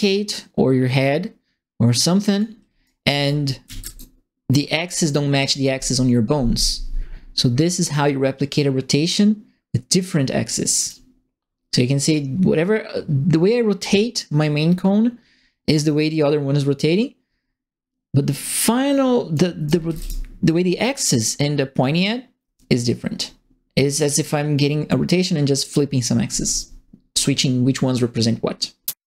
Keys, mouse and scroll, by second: 0.0-2.3 drag, 2.8 right click, 3.0-4.2 typing, 3.2 click, 3.5 right click, 5.1-10.8 drag, 12.0-19.3 drag, 19.4-20.3 typing, 19.6 right click, 22.7-25.0 drag.